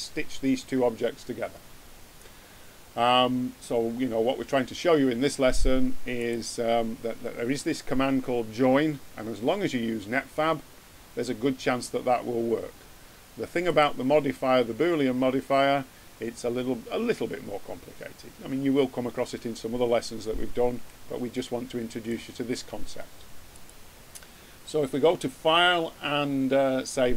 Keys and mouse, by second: 6.1-7.6 drag, 8.0 middle click, 13.5-15.6 drag, 20.8 middle click, 23.5 ctrl+q.